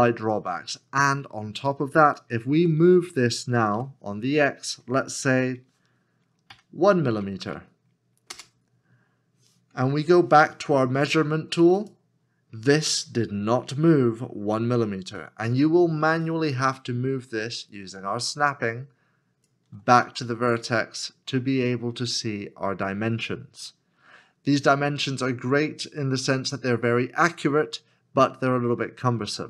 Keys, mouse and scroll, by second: 3.7 y, 6.5 KP_1, 8.3 Return, 16.7 Return, 16.9 ctrl+click.